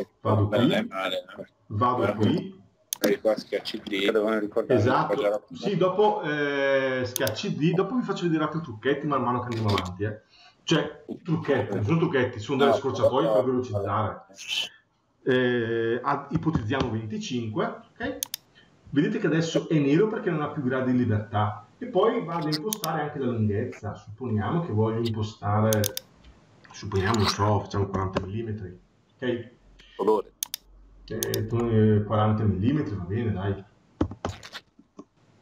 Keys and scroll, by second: 16.7 Return, 27.9 Return, 34.7 Return.